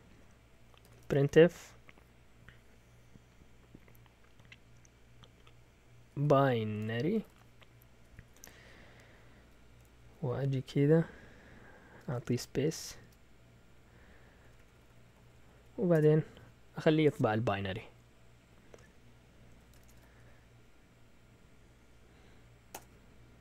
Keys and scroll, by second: 0.6-1.7 typing, 5.7-8.2 typing, 9.6-10.6 typing, 12.0-13.0 typing, 14.1-15.9 typing, 19.5 Escape, 19.6-20.4 typing, 22.7 Return.